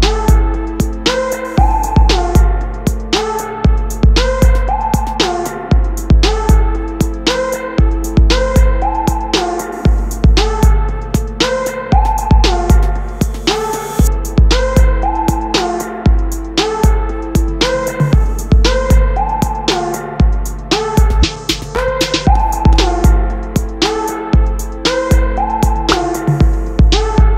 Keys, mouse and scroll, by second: 2.6 KP_3, 3.3 r, 5.0 middle click, 6.0 g, 8.7 click, 9.0-10.2 middle drag, 10.2 click, 10.9-11.4 middle drag, 11.4 click, 12.1-14.2 middle drag, 14.2 shift+s, 15.5 KP_7, 17.0 z, 18.3 shift+a, 21.6-22.2 middle drag, 22.2 s, 24.2-26.0 middle drag, 26.0 KP_1.